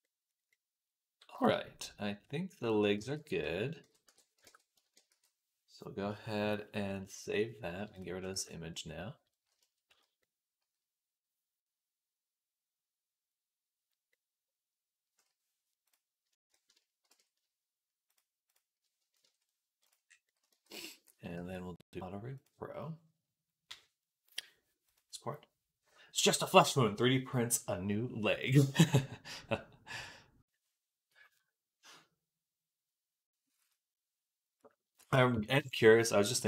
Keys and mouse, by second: 0.0 click, 7.2-36.4 drag.